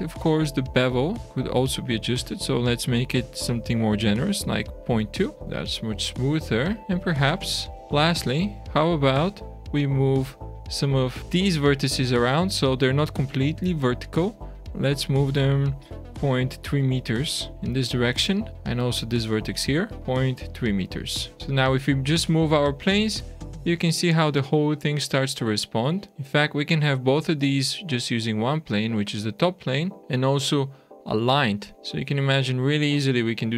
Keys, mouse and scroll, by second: 0.5 click, 1.3 click, 5.3 shift+middle click, 6.8 Tab, 6.8 click, 6.8-7.2 scroll down 4, 7.2 Tab, 7.6-8.1 scroll up 4, 9.3 alt+a, 9.9 click, 10.6 Tab, 11.1 click, 11.2 click, 11.7 click, 17.8-18.5 scroll down 2, 18.5 middle click, 18.6 click, 19.5 click, 21.1 Tab, 21.4 shift+middle click, 21.4 click, 21.6 click, 24.4 shift+middle click, 28.8 click, 31.7 click.